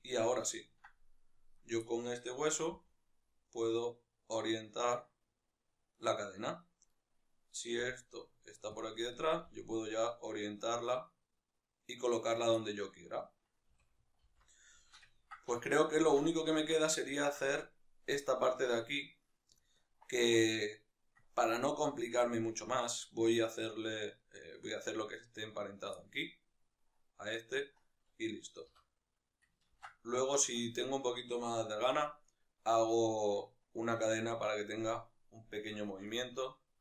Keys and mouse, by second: 1.3 right click, 1.6-5.9 middle drag, 2.5 g, 5.9 right click, 6.6 right click, 7.6 g, 8.6 click, 8.8 right click, 9.2 g, 12.1 right click, 12.3-17.3 middle drag, 13.4 a, 17.3 right click, 18.0-24.5 middle drag, 24.5 right click, 25.7-36.8 middle drag.